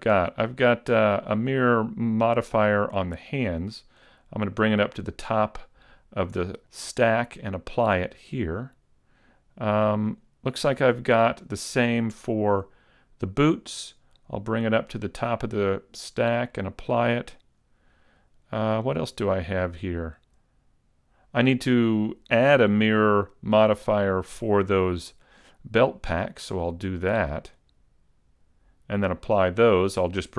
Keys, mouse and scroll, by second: 0.3 right click, 4.7 click, 8.2 click, 10.1 right click, 16.1 click, 17.3 click, 18.9 right click, 20.2 middle click, 22.7-23.4 scroll up 3, 23.6 middle click, 26.9 click.